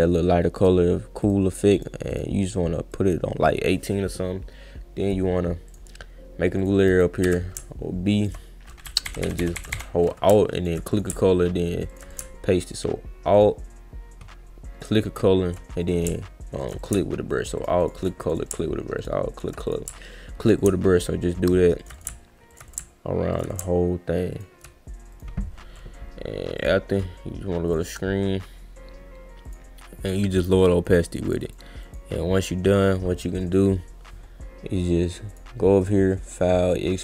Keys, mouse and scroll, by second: 0.6 click, 1.2 click, 1.5 click, 1.7 click, 2.1 click, 2.9 click, 5.0 click, 5.7 click, 6.6 click, 8.2 alt+click, 10.5 alt+click, 10.9 click, 11.9 alt+click, 12.1 click, 13.4 alt+click, 14.8 alt+click, 15.8 click, 16.6 alt+click, 16.8 click, 17.6 alt+click, 17.8 alt+click, 18.0 alt+click, 18.3 click, 19.0 alt+click, 19.4 alt+click, 19.7 click, 20.2 alt+scroll up 2, 20.4 alt+click, 20.6 click, 21.8 alt+click, 21.9 click, 22.5 alt+click, 22.7 click, 23.3 alt+click, 23.5 click, 23.7-24.0 alt+scroll down 2, 24.3 alt+click, 25.1 click, 26.6 click, 29.4 click, 30.0 click, 30.3 click, 30.6 click, 30.8 click, 31.0 click, 31.3 click, 31.5 click, 31.8 click, 35.3 click, 35.8 click.